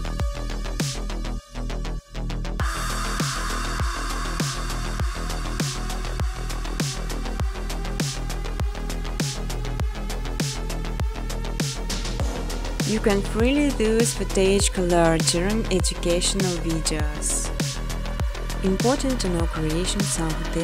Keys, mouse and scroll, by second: 0.2 click, 0.4 click, 0.7 click, 0.9 click, 1.2 click, 1.4 click, 1.7 click, 2.1 click, 2.6-3.3 scroll, 3.4 click, 4.7 click, 5.0 click, 5.7 click, 6.1 click, 6.8 click, 8.1 click, 8.5 click, 8.9 click, 9.6 click, 9.9 click, 10.5 scroll, 11.9 scroll, 12.7 click, 14.5 click, 15.1 click, 15.4 scroll, 15.8 ctrl+c, 16.0 ctrl+d, 16.3 click, 16.6-17.0 typing, 17.3 Return, 17.5 ctrl+c, 17.7 ctrl+d, 18.3 click, 18.6-19.1 typing, 19.5 click, 20.2 click.